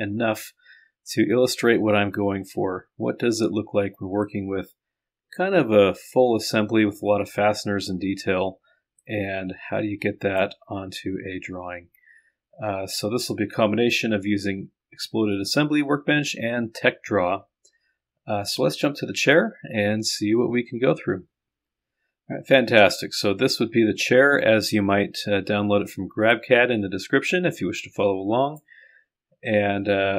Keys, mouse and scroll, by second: 0.9-1.5 scroll down 1, 1.5-3.1 scroll down 1, 3.1-4.0 scroll up 1, 4.4-5.5 drag, 6.2 click, 9.1-10.4 drag, 26.1 scroll down 1, 26.5-28.6 drag.